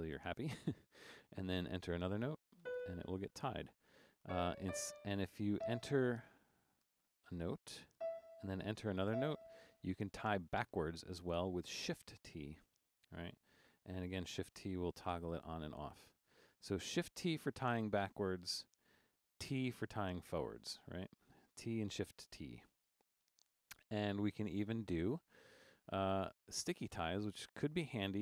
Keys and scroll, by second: 2.0-5.5 typing, 6.8 typing, 7.9-9.1 typing, 12.3 shift+t, 14.6-15.3 typing, 16.3-16.9 typing, 18.7-21.4 typing, 25.6 super+Down, 26.8 Left, 28.1 Down.